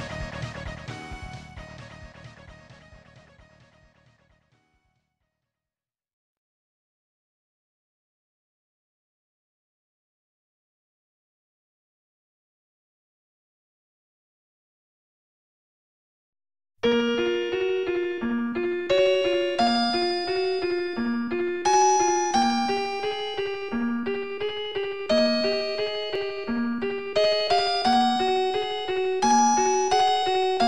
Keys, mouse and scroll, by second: 0.1 typing, 4.9 scroll up 1, 5.7 scroll up 1, 9.2 Tab, 9.6 click, 10.7 ctrl+s, 10.8 click, 11.3 a, 12.0-12.3 scroll down 2, 12.7 scroll down 1, 13.9 0, 15.3 middle click, 16.3 ctrl+s, 16.6 click.